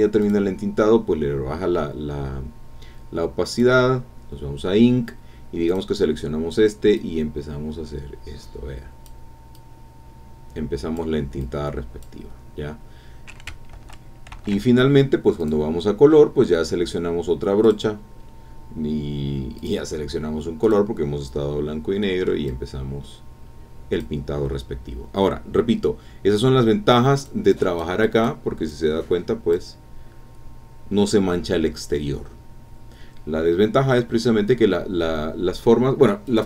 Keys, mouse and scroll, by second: 0.2 click, 3.5 click, 4.3 scroll up 3, 5.7 click, 6.9-9.2 drag, 9.5-11.2 drag, 11.4 click, 12.6-12.9 scroll down 2, 13.7 ctrl+z, 15.4 click, 17.6 click, 19.6 click, 20.6 click, 21.2-22.0 scroll up 2, 22.0 click, 22.3 scroll up 2, 22.5-24.2 drag, 24.2-24.6 scroll down 2, 25.1 scroll down 2, 26.9 click, 27.5 click, 28.0 click, 28.7 click, 30.2-30.5 scroll up 1, 30.6-31.0 scroll down 1, 36.2 click.